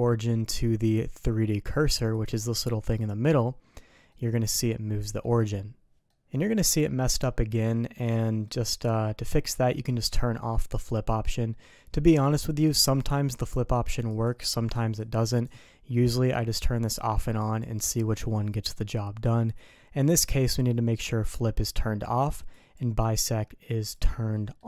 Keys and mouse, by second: 4.1-5.2 middle drag, 6.0 middle drag, 7.0-8.4 middle drag, 8.7 middle click, 11.0 click, 14.0 click, 14.9 click, 16.9 click, 17.4 click, 22.5 click, 23.6 click, 24.3 middle drag.